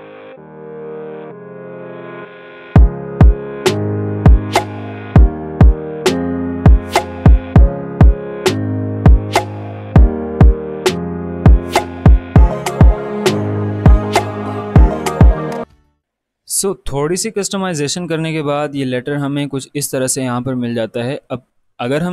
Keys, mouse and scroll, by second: 0.6 ctrl+z, 1.0-2.7 drag, 2.8 click, 3.3 ctrl+z, 3.6-4.7 drag, 4.7 click, 5.6 click, 6.3 ctrl+z, 6.7 click, 8.4 click, 9.4 click, 9.6 ctrl+z, 10.3 click, 11.1 click, 12.0 click, 12.5 ctrl+z, 12.8-14.5 drag, 14.5 ctrl+z, 14.8-16.4 drag, 19.4-22.1 drag, 20.4 click.